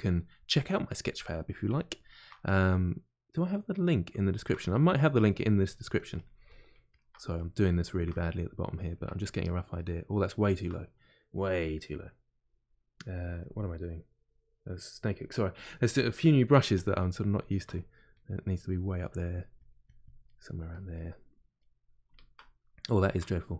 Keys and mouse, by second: 0.5 click, 1.3 middle click, 1.7 shift+click, 2.3-5.1 middle drag, 5.1-8.1 ctrl+drag, 8.1-14.8 middle drag, 14.8-16.5 drag, 16.5 f, 16.9-18.1 middle drag, 18.1-20.2 drag, 20.2 middle click, 20.7 click, 21.5-23.5 middle drag.